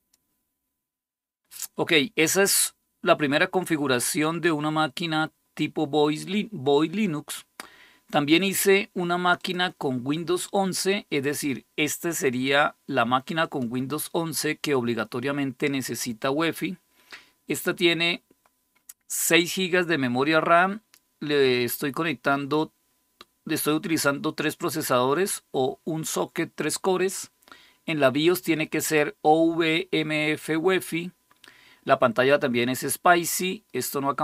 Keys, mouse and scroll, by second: 0.5 click, 9.2 click, 13.2 click.